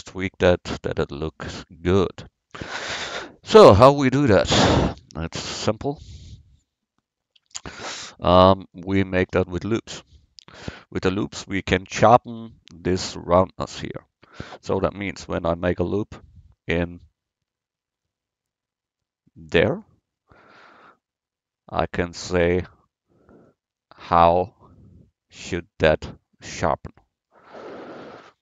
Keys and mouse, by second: 7.4 Tab, 15.5 ctrl+r, 24.4-26.6 middle drag.